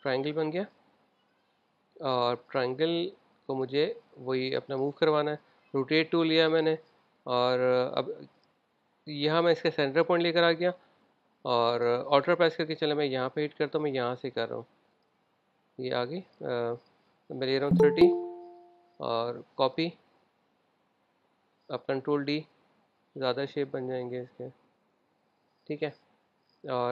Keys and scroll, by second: 18.3-18.7 typing, 22.6 super+d.